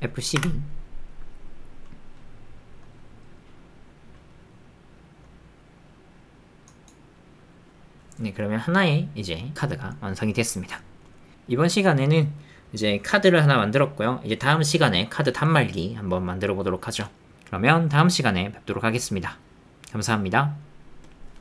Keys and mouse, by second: 0.7 g.